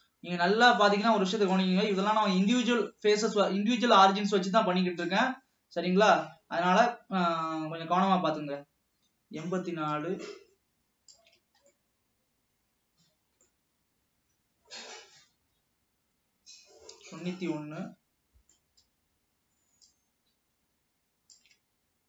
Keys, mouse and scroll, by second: 0.1 shift+click, 2.1-5.2 middle drag, 10.1-11.9 shift+drag, 11.9-15.0 middle drag, 17.5-20.0 middle drag, 20.0 shift+click.